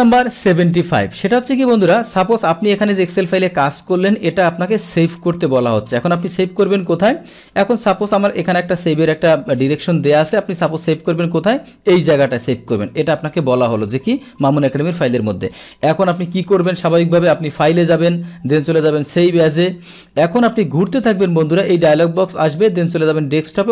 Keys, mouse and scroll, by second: 2.1 click, 3.1 click, 7.7 click, 8.8 click, 9.6 click, 15.1 click, 17.6 click, 19.2 click, 22.3 click.